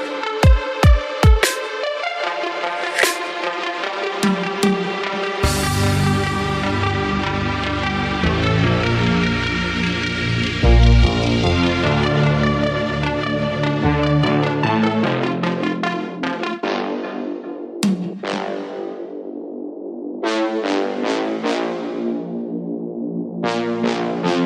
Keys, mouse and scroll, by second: 1.3-4.8 drag, 5.3-5.7 shift+middle drag, 5.7-6.0 scroll down 2, 6.0-7.0 shift+middle drag, 7.0-7.3 scroll up 1, 7.5 click, 8.2 drag, 8.8 g, 11.2-12.5 middle drag, 12.5-13.0 scroll up 2, 13.0-14.1 shift+middle drag, 14.1-14.4 scroll up 2, 14.4-15.4 shift+middle drag, 15.4 click, 16.4 shift+click, 17.5 ctrl+p, 19.7 drag, 20.4 click, 20.9 shift+drag, 21.6-23.0 drag, 23.0-24.3 scroll down 1, 24.3 click.